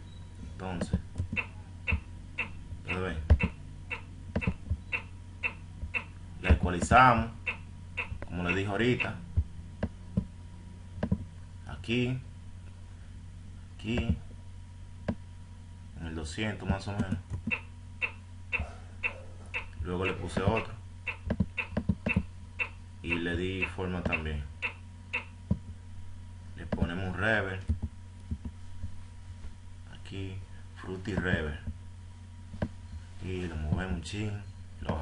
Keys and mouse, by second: 2.0 click, 4.7-8.2 drag, 10.6 click, 18.6-19.9 drag, 21.5-23.0 drag, 32.0 click, 34.1 click.